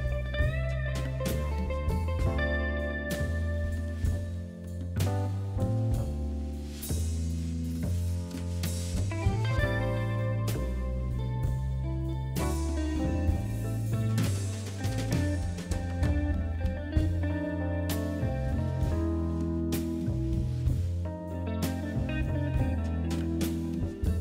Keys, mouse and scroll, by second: 2.2 middle click, 2.2 scroll down 2, 3.1 middle click, 9.3 click, 9.7 click, 11.7 click, 12.5 click, 17.4 click, 18.3 click, 21.5 click, 23.4 click.